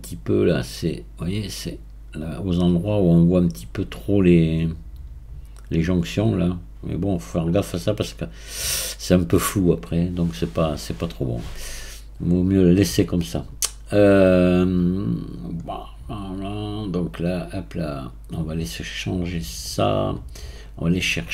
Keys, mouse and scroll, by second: 0.3-1.4 drag, 1.4-19.7 right drag, 19.7-21.3 drag.